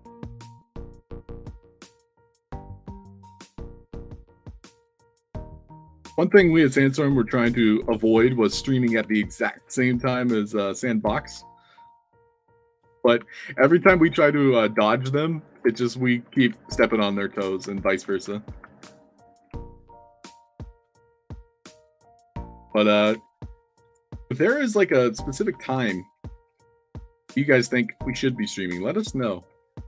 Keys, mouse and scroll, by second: 0.0-1.7 drag, 2.1-3.2 alt+drag, 3.9 click, 4.3 d, 4.7 shift+click, 5.0 a, 6.1 shift+click, 6.9-8.5 drag, 9.0-10.9 alt+drag, 11.1 d, 11.8 click, 12.2 click, 12.6 click, 13.5 shift+click, 14.6 shift+click, 15.4 shift+click, 15.8 alt+click, 16.4 s, 17.0-17.4 alt+drag, 17.4-19.0 typing, 19.5-20.5 alt+drag, 20.7 s, 21.7 ctrl+d, 22.7 middle click, 23.0 ctrl+z, 23.4 scroll down 2, 23.7 click, 24.5 drag, 24.8 w, 26.4 d, 27.5-28.1 drag, 27.5 s, 29.4 f.